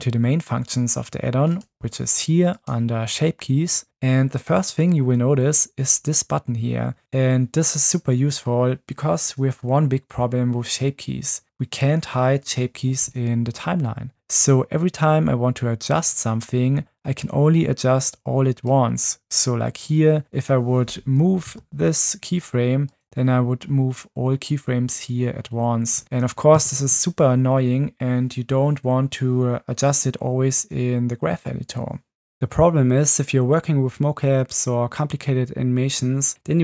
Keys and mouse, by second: 2.5 click, 18.6 click, 19.0 click, 21.4 g, 26.8 ctrl+z.